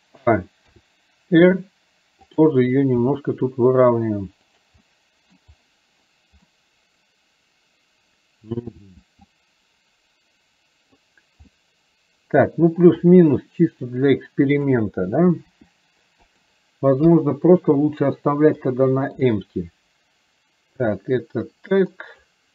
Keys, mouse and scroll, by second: 4.9 middle click, 6.5-8.6 middle drag, 9.5-11.0 drag, 11.6 middle click, 14.0 click, 17.1 KP_1, 18.6 shift+middle click, 21.0-22.3 drag.